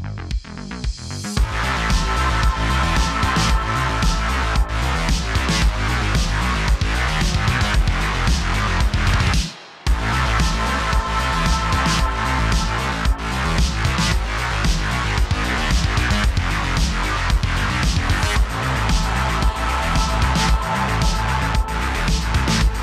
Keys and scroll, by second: 0.1 shift+d, 2.7 shift+f, 3.0 shift+d, 4.0 space, 4.1 space, 5.3 space, 5.4 space, 6.9 shift+f, 7.7 shift+d, 8.8 typing, 10.2 super+z, 10.4 typing, 12.3 super+z, 12.7 typing, 14.3-16.0 typing, 15.6 super+z, 17.5-18.5 typing, 20.0 typing, 22.6 typing.